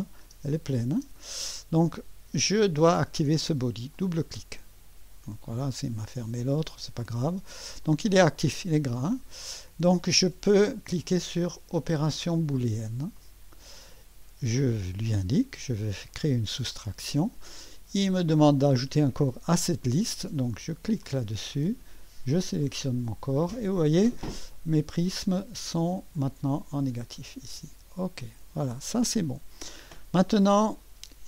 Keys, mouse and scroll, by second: 0.0 click, 0.3-1.0 typing, 3.9 click, 6.0 click, 6.7 click, 7.9 click, 9.0 click, 13.2 click, 15.1 click, 16.1 click, 21.0 click, 22.6 click, 26.2-27.4 drag, 28.2 click.